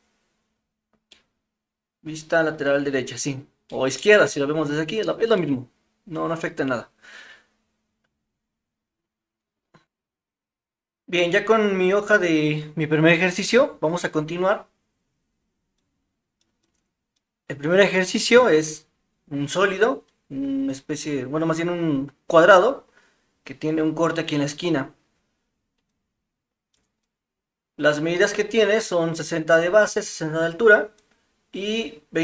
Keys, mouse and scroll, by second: 1.1-2.6 middle drag, 3.7 middle click, 5.4-9.5 middle drag.